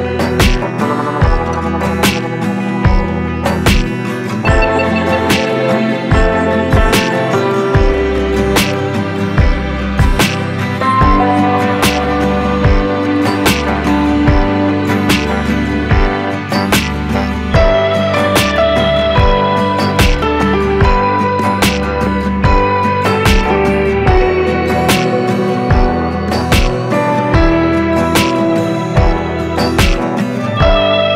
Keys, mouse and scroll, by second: 4.4-7.4 drag, 7.4 click, 12.9 click, 16.2 click, 21.7 click, 25.8 click, 28.4-31.1 drag.